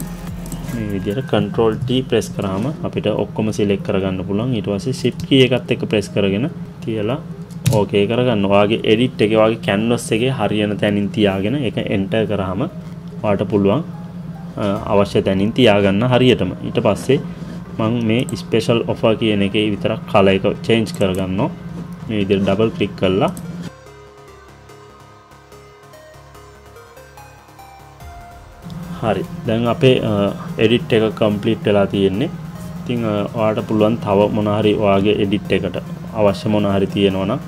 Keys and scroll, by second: 7.7 Return, 11.9 Return.